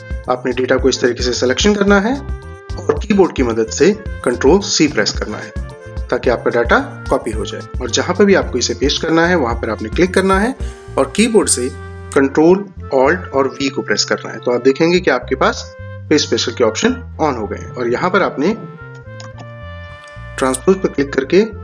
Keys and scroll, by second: 4.9 ctrl+c, 13.6 ctrl+alt+v, 19.2 ctrl+z.